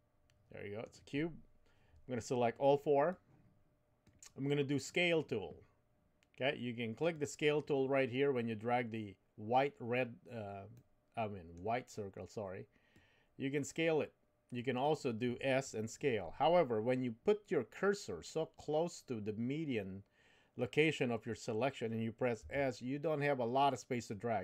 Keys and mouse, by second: 3.2-4.4 drag, 10.7 middle click, 13.0-14.8 drag, 22.4 s.